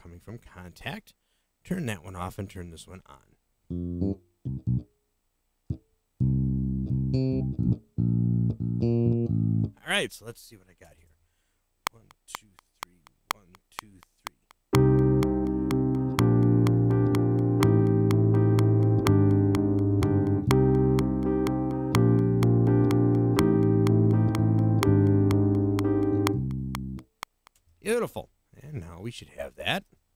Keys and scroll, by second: 10.8 0, 11.8 *, 27.5 space, 29.8 space.